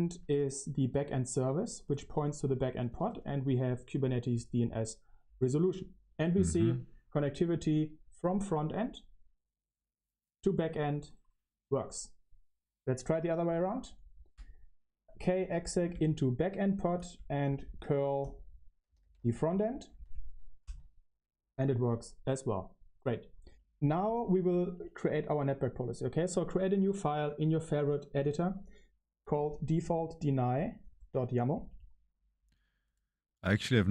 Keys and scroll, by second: 0.0-3.7 typing, 5.1 Return, 5.1 typing, 15.3 Up, 15.3-19.7 typing, 19.8 Escape, 20.6 ctrl+c, 21.8 ⇡, 23.4 Return, 24.7-26.7 typing, 26.7 Escape, 26.7 ctrl+c.